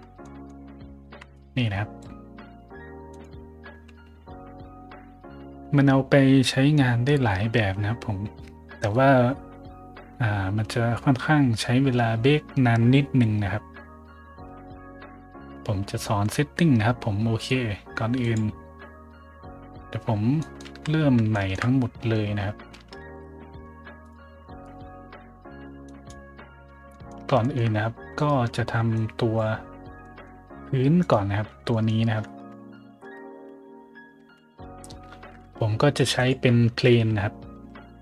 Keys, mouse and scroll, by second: 0.1 middle click, 0.9 ctrl+b, 1.3 click, 3.0 click, 18.1 click, 20.3 middle drag, 20.6 z, 21.2 shift+middle drag, 22.9 ctrl+alt+b, 24.0 click, 25.8 click, 26.7 scroll down 1, 26.8 middle drag, 27.4 shift+middle drag, 28.1 right click, 28.4 middle drag, 28.9 click, 30.4-35.1 typing, 30.9 right click, 31.6 middle drag, 34.8 middle click, 36.1 click, 37.6 g.